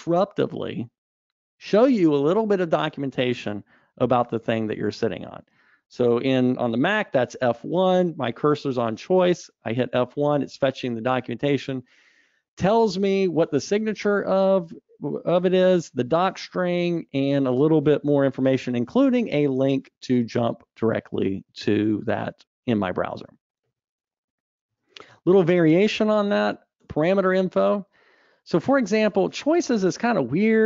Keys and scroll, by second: 9.8 F1, 25.2 super+Up.